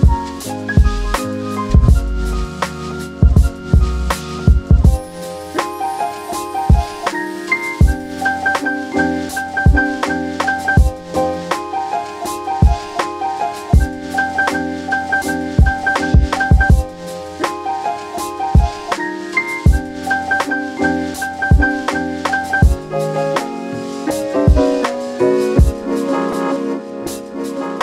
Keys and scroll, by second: 9.7 super+s, 10.1 Right, 10.5 BackSpace, 10.6 2, 10.7 Return, 12.8 space.